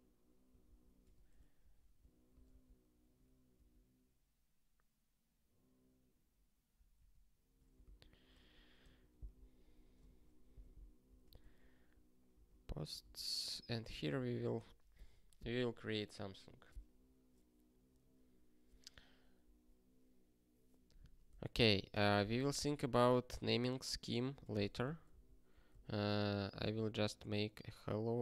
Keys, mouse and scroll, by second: 7.7 ctrl+f, 9.2 p, 13.0 Return, 22.2 ctrl+f, 26.8 ctrl+s.